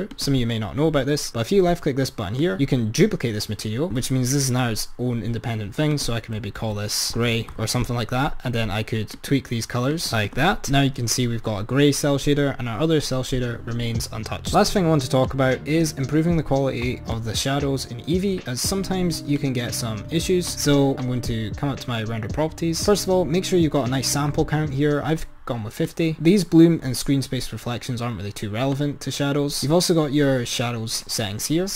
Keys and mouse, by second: 0.1 click, 2.4-4.1 drag, 6.0-7.1 drag, 7.1 BackSpace, 9.1-10.9 drag, 15.4 click, 18.3-19.6 drag, 20.9 click, 25.8-27.2 drag, 28.8-31.0 drag.